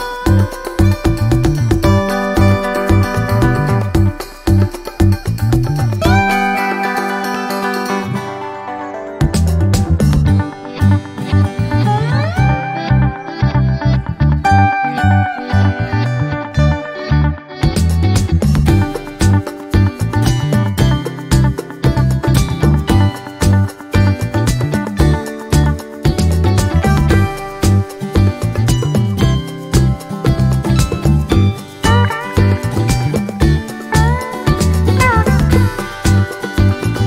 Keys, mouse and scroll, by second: 2.1-2.7 ctrl+scroll down 4, 3.0-3.6 ctrl+scroll up 2, 3.6 ctrl+click, 4.1-7.3 ctrl+drag, 7.4 click, 8.2 click, 9.3-10.8 drag, 11.3 ctrl+d, 12.1 click, 12.9-14.7 ctrl+shift+drag, 15.0-16.1 ctrl+shift+drag, 17.0 click, 18.3-18.8 ctrl+scroll up 2, 19.2 ctrl+shift+click, 21.0 click, 21.5 click, 22.7 shift+click, 23.7 click, 25.9 click, 26.5 click, 27.5-29.3 drag, 28.5 space, 30.8-31.2 ctrl+scroll down 2, 31.8-32.1 ctrl+scroll up 2, 32.9-33.3 ctrl+scroll down 2, 33.8 ctrl+click, 34.7 shift+click, 36.1 ctrl+shift+g, 36.6 ctrl+click.